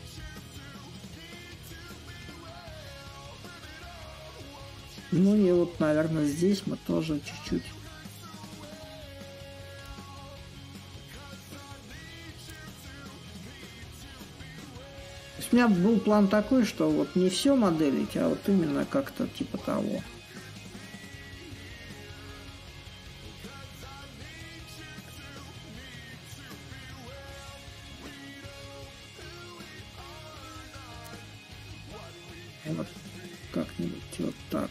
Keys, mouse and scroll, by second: 6.7-11.8 drag, 13.0-18.1 drag, 24.7-26.3 drag, 26.3 s, 27.9-33.0 drag, 33.5-34.7 drag.